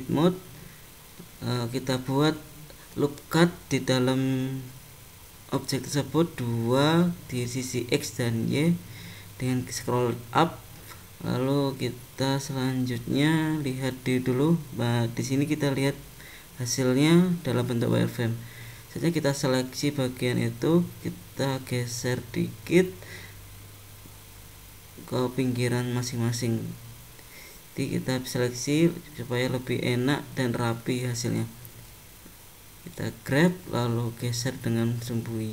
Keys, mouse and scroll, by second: 1.1 ctrl+r, 7.3 ctrl+r, 13.5 click, 14.2 middle click, 16.2 scroll up 2, 17.8 click, 18.5 click, 21.3 g, 28.3 click, 28.9 click, 30.8 g.